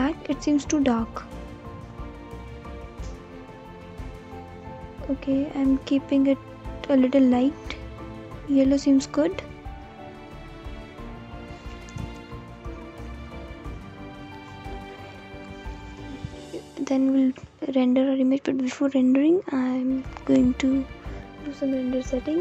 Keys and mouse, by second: 2.3 click, 9.7-11.3 drag, 12.7 click, 17.0-22.3 drag.